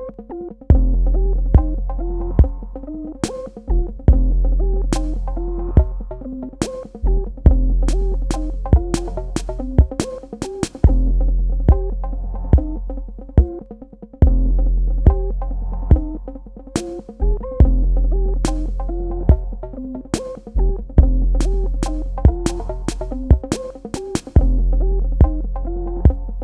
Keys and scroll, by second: 3.4 shift+Num_Lock, 17.8 ctrl+Num_Lock, 17.9 z.